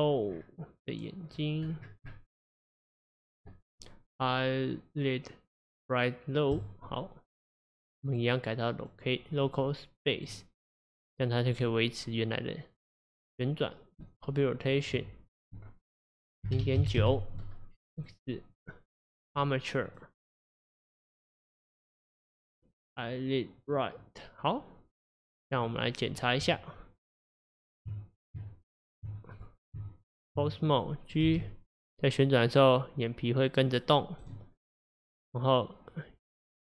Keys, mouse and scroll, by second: 8.1-10.8 drag, 11.6 click, 13.0-14.9 drag, 16.1-18.1 drag, 18.6-22.9 drag, 25.6 click, 26.5 Tab, 28.4 Tab, 29.4 click, 29.8 Tab, 30.8 click, 31.3 g, 36.3-36.6 middle drag.